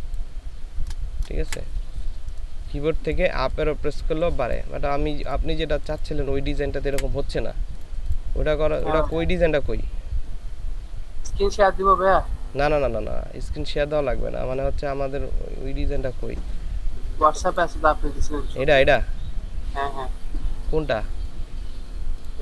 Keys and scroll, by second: 1.5 Delete, 7.0 Delete, 8.1 Delete.